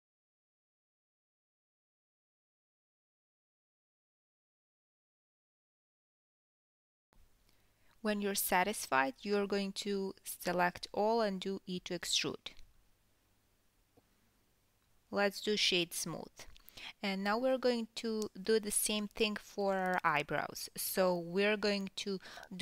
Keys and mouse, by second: 0.0 middle click, 0.8 shift+click, 1.0-22.6 middle drag, 1.0-7.7 typing, 2.3 ctrl+z, 2.7 ctrl+z, 3.4-3.8 drag, 4.0 click, 6.0 drag, 8.7 ctrl+z, 9.2 g, 11.2 e, 12.8 Tab, 13.0 KP_1, 15.7-22.6 shift+right drag, 17.5-18.5 drag, 18.1 Tab, 18.3 Tab, 18.6 click, 18.8 Tab, 19.8 Tab, 20.3 2, 20.4-21.1 drag, 21.3 shift+d, 21.8 p, 22.2 Tab, 22.5 click.